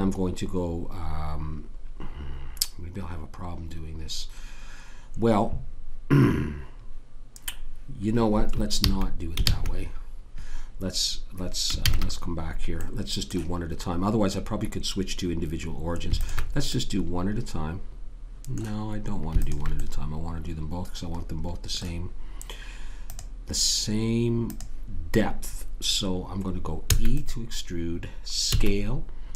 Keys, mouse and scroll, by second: 8.8 ctrl+z, 9.4 ctrl+z, 11.8 ctrl+z, 12.8-14.9 middle drag, 16.2 click, 16.7-18.5 middle drag, 19.4 click, 19.8-21.2 middle drag, 21.2 click, 23.1 click, 26.9 e, 28.5 s.